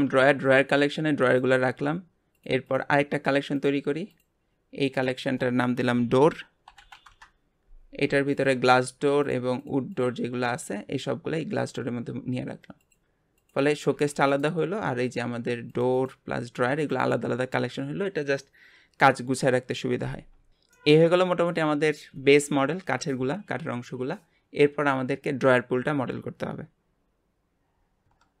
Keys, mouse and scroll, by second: 0.5 click, 2.3 click, 2.6 click, 3.5-4.9 drag, 5.0-6.8 drag, 6.8 o, 8.3 click, 8.7 ctrl+click, 9.2 ctrl+click, 9.6 ctrl+click, 9.9 ctrl+click, 10.6 click, 12.8 click, 13.4 click, 13.9 g, 15.7 click, 15.9 click, 16.8 click, 20.5 click, 20.7-23.9 middle drag.